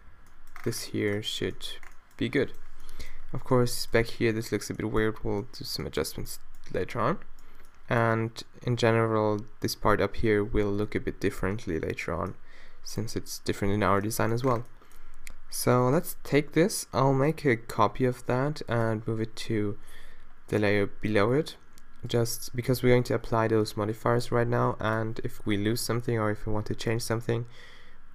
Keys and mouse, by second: 0.0 Left, 0.2 Left, 18.3 shift+d, 19.1 m, 22.1-25.9 drag.